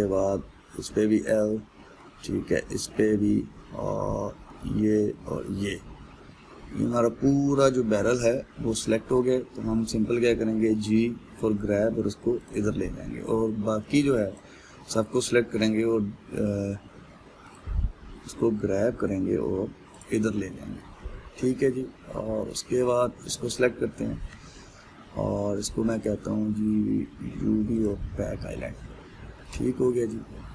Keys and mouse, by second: 1.5 l, 2.1-3.2 middle drag, 3.2 l, 3.6-5.2 middle drag, 5.2 l, 5.9 l, 6.3-9.3 middle drag, 11.3 g, 15.0 click, 16.2 g, 19.0 g, 24.1 click, 28.4-30.5 drag.